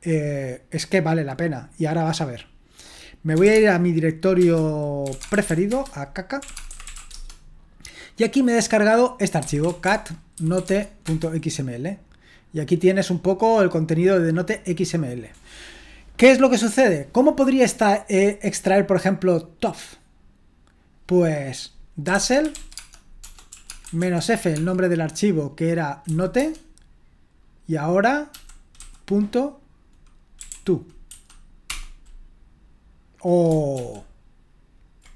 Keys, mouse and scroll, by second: 3.2-7.4 typing, 4.4 Return, 9.2-11.1 typing, 19.7-22.1 drag, 21.8-24.6 typing, 26.1 typing, 26.4 Tab, 30.2-31.1 typing, 31.7 Return, 33.8 ctrl+p.